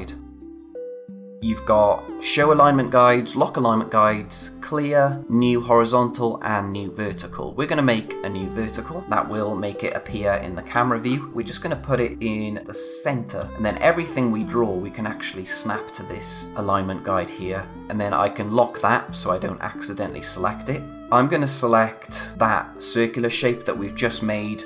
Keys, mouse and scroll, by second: 0.4 click, 8.4 click, 9.3-9.7 scroll up 1, 11.3 click, 13.3 scroll down 1, 16.5-17.7 scroll up 1, 18.7 click, 20.9 click.